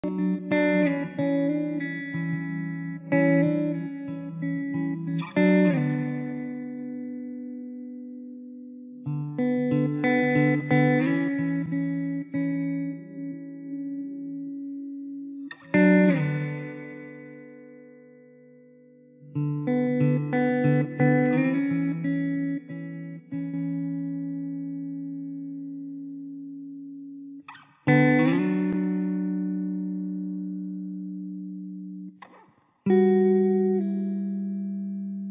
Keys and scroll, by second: 6.0 Return, 26.4 ctrl+d.